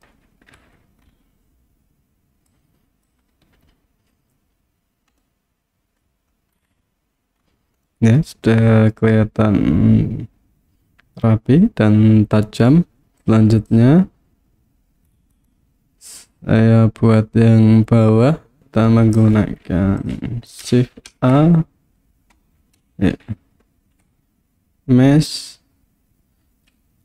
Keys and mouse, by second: 0.0 click, 0.7 Tab, 2.5 click, 5.2-6.0 middle drag, 7.9-12.7 middle drag, 13.0 KP_1, 13.2 click, 18.6-19.2 drag, 21.1 shift+a, 23.2 shift+a.